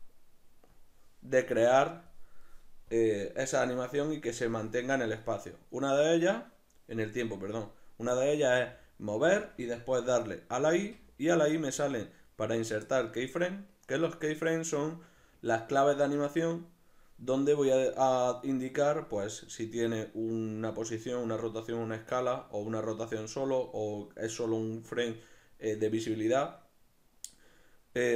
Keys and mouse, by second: 0.7-6.0 drag, 6.0 right click, 8.5 g, 9.4 click, 10.8 i.